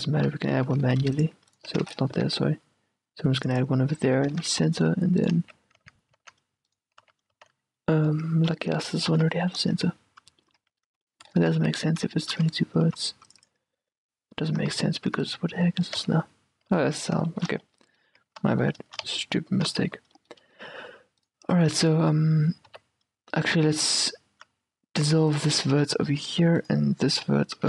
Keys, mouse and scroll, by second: 1.3 ctrl+r, 1.8 ctrl+z, 2.4 ctrl+r, 3.6-5.6 drag, 4.1 a, 4.5 ctrl+r, 5.5-7.5 typing, 6.8-8.6 right drag, 8.6-11.4 middle drag, 8.8 a, 9.2 ctrl+r, 9.9 q, 10.8 q, 11.7 z, 12.5-14.1 middle drag, 13.0 ctrl+r, 13.5-15.8 drag, 14.7 a, 15.3-17.4 right drag, 16.2 z, 16.9 z, 17.4-22.8 middle drag, 18.2 a, 18.5 z, 19.1 z, 19.8 z, 22.8 right click, 22.8 x, 25.8 a, 26.3 a, 26.6 x, 27.3 a.